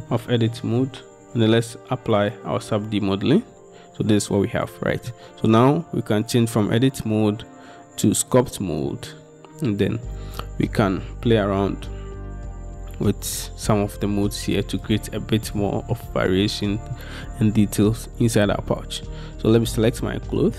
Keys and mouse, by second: 0.2 Tab, 3.5 Tab, 4.2-5.2 drag, 6.7-10.1 drag, 14.1-16.1 drag.